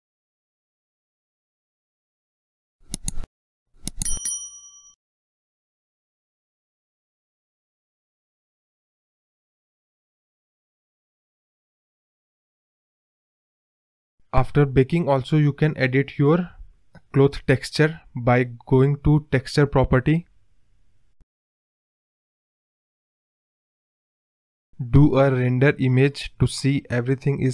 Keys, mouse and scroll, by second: 0.6-1.1 scroll up 4, 3.0-7.3 drag, 9.2 space, 9.7-10.5 scroll up 2, 10.5-11.2 scroll down 1, 15.9 space, 17.0 click, 18.0 click, 20.4-21.7 drag, 21.8-22.6 drag, 22.7 click, 26.4-27.5 drag.